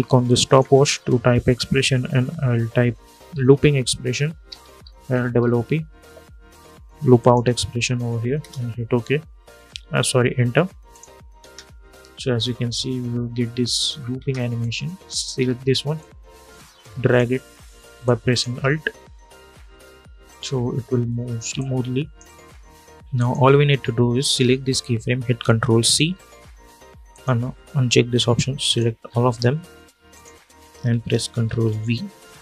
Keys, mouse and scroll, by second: 0.2 alt+click, 2.4-5.7 typing, 4.2 ctrl+a, 6.9 click, 8.1 Return, 10.6 click, 11.1 space, 13.9 space, 14.3-15.7 drag, 15.7-18.2 alt+drag, 18.2 space, 21.3-22.9 drag, 25.6 ctrl+c, 26.8 click, 28.7 scroll down 1, 29.0 scroll up 1, 29.1-29.6 scroll down 1, 29.8 shift+click, 31.3 ctrl+v.